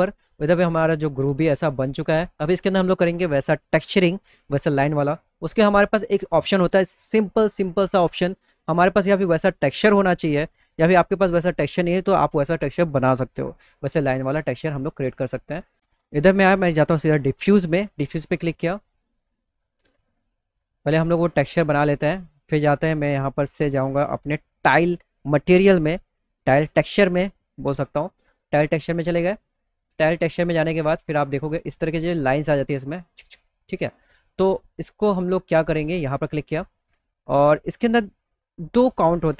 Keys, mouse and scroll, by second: 0.9 middle click, 1.2 click, 1.7 middle click, 4.7 middle click, 5.4 middle click, 5.7 alt+middle click, 8.0 middle click, 13.4 middle click, 13.8 middle click, 14.7 click, 18.1 click, 20.7 click, 21.9 scroll down 1, 23.5 scroll down 1, 25.6 click, 28.0 click, 31.4 click, 31.6 click, 33.3 click, 35.4 click, 36.8 click, 38.8 click.